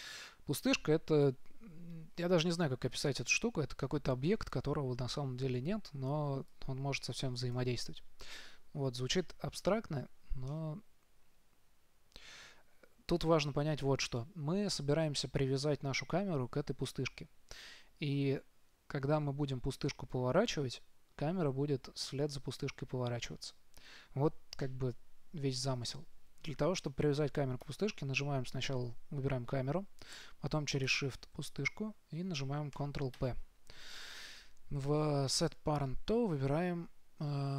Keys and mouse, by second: 1.4 KP_3, 2.4-4.8 middle drag, 6.5 middle click, 6.8-8.6 drag, 10.8-12.7 middle drag, 27.9-33.4 right drag, 33.4 ctrl+p.